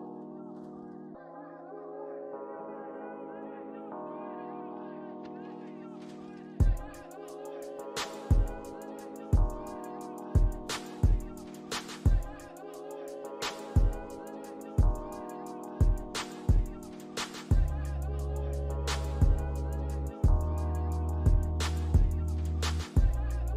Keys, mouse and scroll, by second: 2.8 middle click, 3.7 scroll down 1, 5.2 alt+middle click, 5.6 alt+scroll up 1, 6.3 alt+middle click, 9.4 scroll down 1, 9.9 alt+middle click, 10.2 alt+scroll up 2, 10.5 right click, 12.6 ctrl+click, 14.5 ctrl+click, 15.8 ctrl+click, 17.1 alt+middle click, 22.1 ctrl+click.